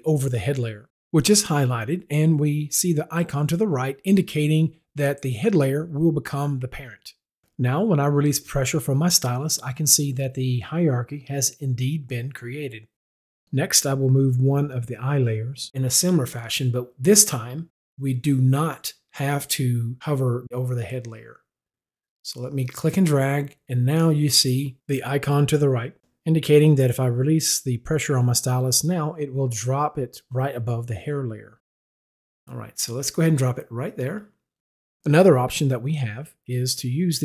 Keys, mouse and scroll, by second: 8.6 click, 21.9 click, 34.1 click.